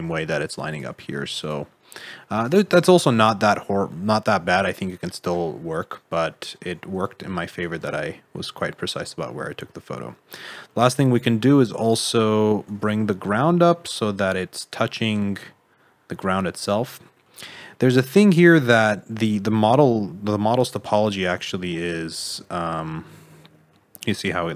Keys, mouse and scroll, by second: 0.9 s, 1.5 g, 2.6 s, 3.4 g, 5.3 middle click, 6.9 Tab, 7.4 Tab, 7.8 alt+z, 8.0 middle click, 11.8 click, 12.6 g, 14.9 middle click, 17.9 scroll up 4, 18.3 middle click, 19.0 middle click, 20.0 middle click, 21.5 scroll down 1, 21.6 alt+z, 21.9 middle click.